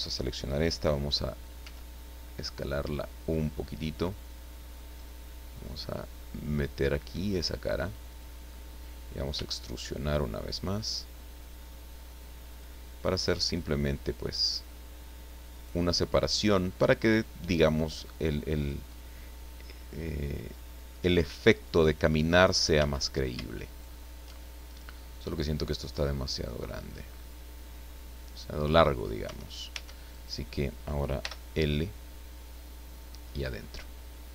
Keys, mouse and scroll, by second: 1.6 s, 3.2 click, 4.7-8.4 drag, 9.3 e, 12.5 click, 14.3 click, 15.5 right click, 17.2-18.8 drag, 18.9-19.3 scroll down 1, 20.0-20.6 scroll up 1, 22.7 a, 23.7 alt+shift+right click, 25.1-28.7 drag, 29.2 Tab, 30.1 right click, 31.2 l, 32.4-34.3 drag.